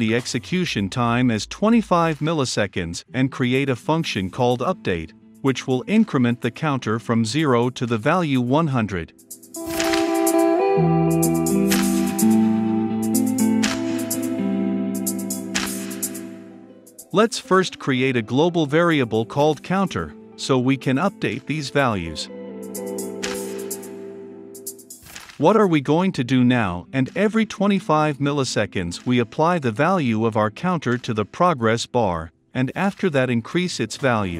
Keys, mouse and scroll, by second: 0.0-2.6 typing, 3.2 click, 3.7 Return, 4.5-6.6 typing, 7.9-8.8 typing, 10.0 click, 10.5 click, 10.6 right click, 10.7 click, 11.0 Return, 11.3-15.8 typing, 15.3 Return, 15.5 Right, 15.9 Return, 17.7 click, 18.6 click, 18.8 Return, 18.9-21.8 typing, 24.3 click, 24.9 Tab, 25.1 Return, 25.2-29.9 typing, 31.0 click, 31.0-33.8 typing, 32.2 Return.